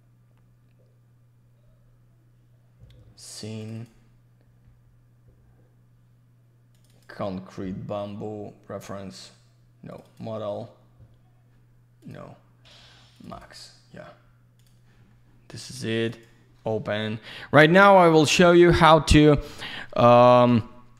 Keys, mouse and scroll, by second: 3.6 ctrl+shift+click, 3.7 ctrl+shift+click, 6.7 ctrl+shift+click, 9.9 ctrl+shift+click, 10.0 ctrl+shift+click, 12.0 ctrl+shift+click, 13.1 ctrl+shift+click, 13.4 ctrl+shift+double click, 14.6 ctrl+shift+click, 16.1 ctrl+shift+click.